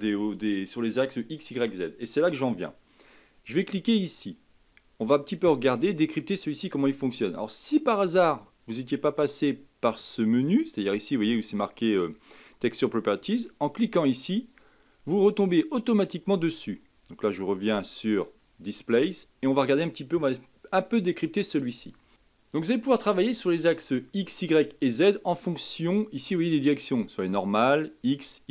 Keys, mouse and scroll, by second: 4.1 click, 14.4-17.5 drag, 18.4 click, 22.1 shift+middle click, 22.2 scroll up 1, 22.7-25.0 shift+middle drag, 25.0-28.1 drag.